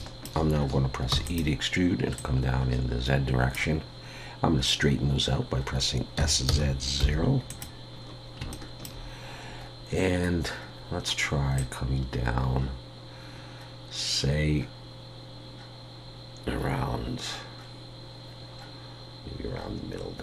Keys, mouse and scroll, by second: 0.0 shift+middle click, 1.1 e, 2.2 click, 8.1-8.4 scroll down 1, 8.5 shift+middle click, 11.6 click.